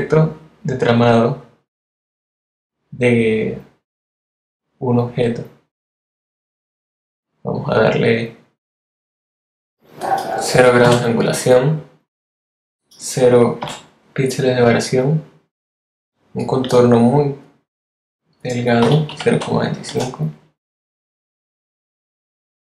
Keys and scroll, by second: 10.8 0, 13.5 0, 18.8 0, 19.2 2, 19.8 5.